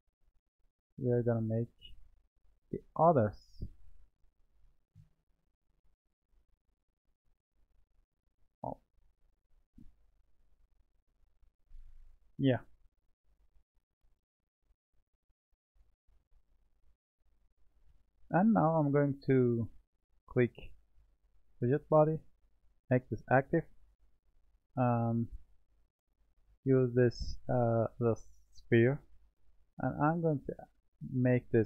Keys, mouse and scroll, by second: 1.3 click, 4.2-5.0 middle drag, 6.2-8.1 middle drag, 8.1 drag, 11.4 click, 13.5-14.8 shift+middle drag, 15.4-18.4 middle drag, 20.0 click, 21.4-24.5 drag, 25.1-28.2 drag, 29.8-31.0 middle drag, 31.0 click.